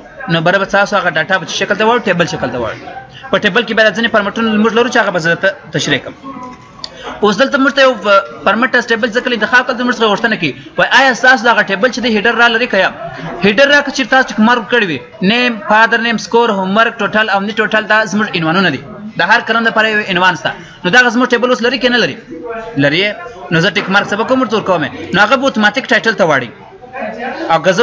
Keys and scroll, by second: 5.4 ctrl+z, 27.0 ctrl+z.